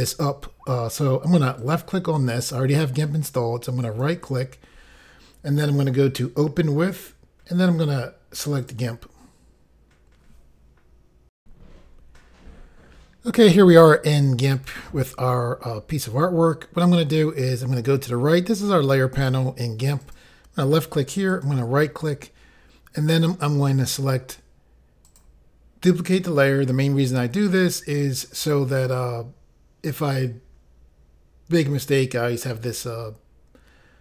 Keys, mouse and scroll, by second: 1.6 click, 3.9 right click, 8.7 click, 11.4 Pause, 20.0 click, 21.3 right click, 25.0 click.